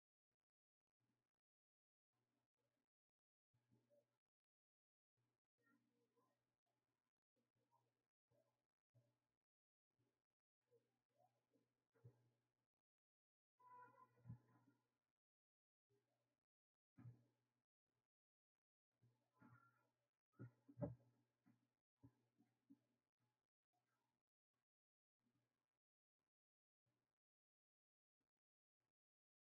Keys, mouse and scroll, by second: 0.3-2.9 right drag, 2.9 drag, 4.4 click, 7.0 click, 7.7-14.3 right drag, 14.3 Tab, 19.3 click, 19.8 click, 25.1-29.4 drag.